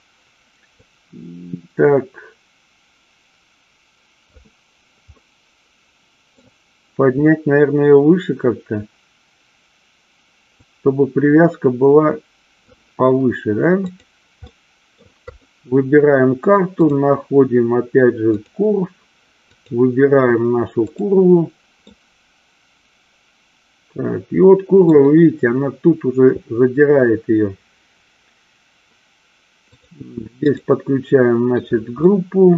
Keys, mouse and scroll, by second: 1.0-4.5 drag, 5.4-6.5 middle drag, 10.8-12.9 drag, 14.0 click, 14.6 middle click, 15.5 click, 16.9-18.8 drag, 19.5 click, 22.1-25.0 middle drag, 29.8-30.8 drag, 32.1-32.5 middle drag.